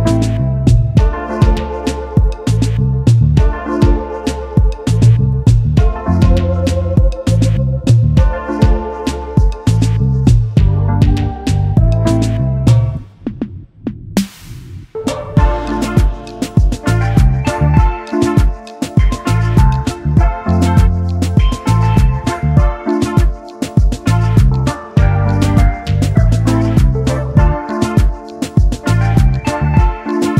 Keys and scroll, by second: 26.6 Return.